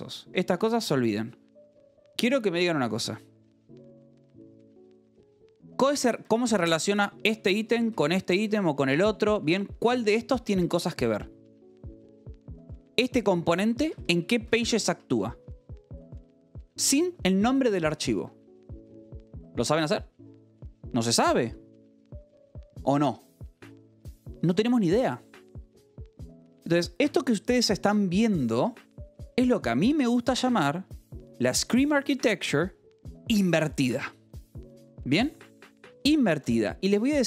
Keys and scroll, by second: 0.4 u, 1.0 Escape, 3.8 h, 4.4 k, 6.0-8.8 typing, 6.1 Escape, 7.3 Escape, 8.3 Escape, 9.9 k, 10.2 j, 10.8 k, 13.4 shift+v, 13.7 Escape, 14.6 j, 14.8 Escape, 15.7 j, 16.3 j, 16.6 Escape, 36.8 k.